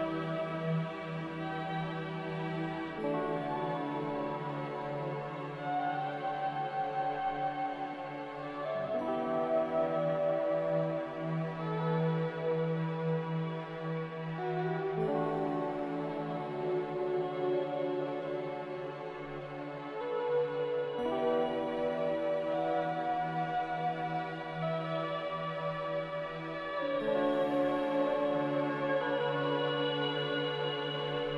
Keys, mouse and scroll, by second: 0.2 c, 1.0 z, 2.8 5, 3.0 Return, 4.8 c, 8.5 2, 11.4 z, 18.0 z, 21.6-27.1 typing, 24.6 Tab, 28.5 a, 29.7 f.